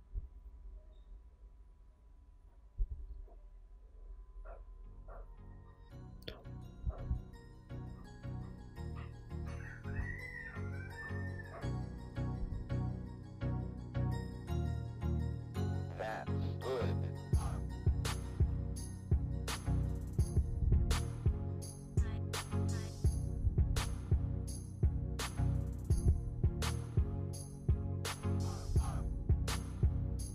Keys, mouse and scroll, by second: 0.0 ctrl+t, 0.8-1.7 drag, 3.0 click, 3.5 ctrl+KP_Add, 4.1 click, 4.5 click, 4.6 alt+click, 5.8 click, 7.7 click, 8.0 click, 8.9 click, 9.8 click, 10.2 click, 10.4 click, 12.1 click, 12.3 Tab, 12.4 scroll down 3, 12.6-12.9 scroll up 4, 12.9-14.3 drag, 14.3 scroll down 3, 14.6 scroll up 2, 15.2 click, 15.8 click, 16.7-17.0 scroll up 1, 17.0 click, 17.5 Tab, 17.6 click, 17.9 ctrl+KP_Add, 18.3 click, 18.4 click, 19.4 click, 19.7 ctrl+t, 20.1 x, 20.3 ctrl+z, 22.1-23.2 drag, 23.2-24.3 scroll up 2, 24.3 scroll up 1, 24.8 click, 25.0 shift+d, 25.5 click, 26.4-27.9 drag, 27.9 ctrl+z, 28.2 click, 29.2 click, 29.4 ctrl+t, 29.6 middle click, 29.9 scroll up 2, 30.2-30.3 drag.